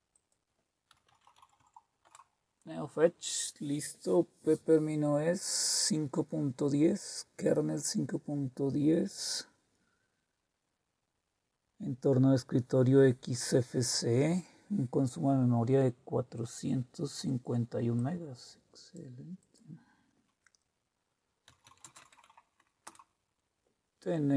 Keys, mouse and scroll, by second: 0.1 click, 0.6-1.8 typing, 2.1 Return, 17.9 click, 19.4 click, 21.2-22.8 typing.